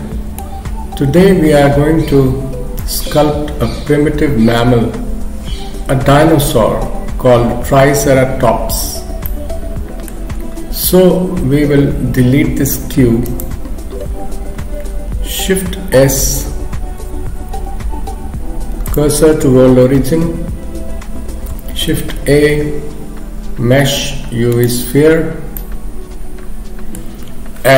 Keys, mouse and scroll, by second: 0.9-1.6 scroll up 1, 9.3 middle click, 10.4-11.6 scroll up 2, 12.6 x, 16.0 shift+s, 17.6 shift+s, 18.9 shift+click, 22.2 shift+a, 25.6 middle click.